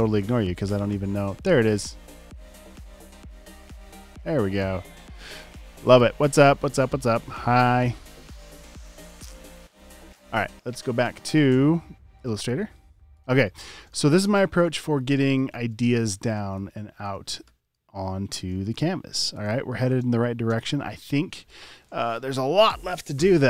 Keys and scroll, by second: 13.5 v, 15.1 alt+super+space, 15.8-20.5 typing.